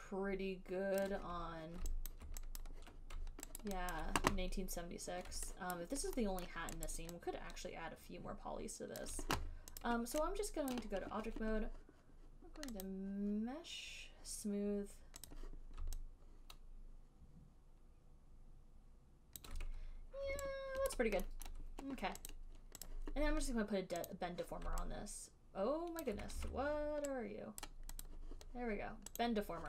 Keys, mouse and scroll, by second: 1.3 click, 2.4 alt+right click, 2.9 ctrl+click, 3.1 ctrl+click, 3.9 alt+right click, 4.3 alt+click, 5.6 alt+right click, 6.0 alt+click, 6.8 alt+middle click, 7.2 alt+click, 9.4 alt+click, 9.7 alt+right click, 10.2 click, 11.1 right click, 13.2 right click, 15.3 click, 15.6 click, 19.7 alt+click, 21.3 alt+click, 21.8 alt+middle click, 22.6 click, 23.2 click, 23.4 alt+click, 24.4 click, 26.3 alt+click, 26.6 ctrl+z, 28.0 right click, 28.4 right click, 29.5 right click.